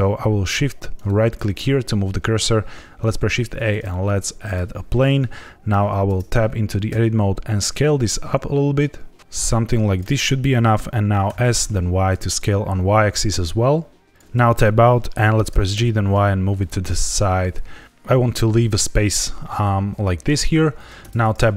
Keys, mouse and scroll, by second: 0.9 shift+right click, 3.0 shift+a, 6.0 Tab, 6.8 s, 9.8 click, 11.2 s, 11.6 y, 14.1 click, 14.3 Tab, 15.4 g, 15.7 y, 20.9 Tab.